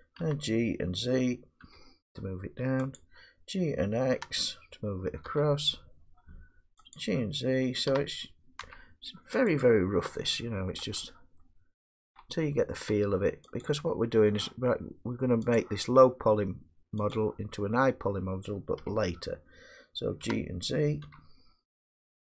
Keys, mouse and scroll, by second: 0.2 g, 1.6 z, 3.0 click, 4.1 g, 5.3 x, 7.0 click, 7.9 g, 8.6 z, 9.6 click, 10.7 middle click, 11.4 middle click, 12.2 Tab, 12.9 Tab, 13.6 click, 15.6 click, 17.1 click, 18.1 middle click, 18.8 1, 20.2 g, 21.0 z.